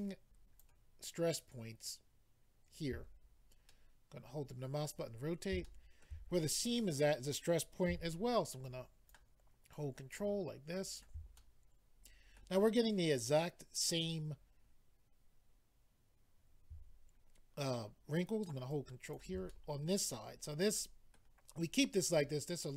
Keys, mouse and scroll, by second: 0.0 ctrl+click, 3.2-3.5 scroll down 2, 3.7 middle click, 5.6 shift+middle click, 6.3-7.3 scroll up 3, 8.6 ctrl+click, 9.7 ctrl+click, 10.7 ctrl+click, 11.3 middle click, 12.6-13.1 scroll down 1, 13.1 middle click, 18.7 ctrl+click, 19.5 middle click, 20.7 middle click, 22.1 middle click.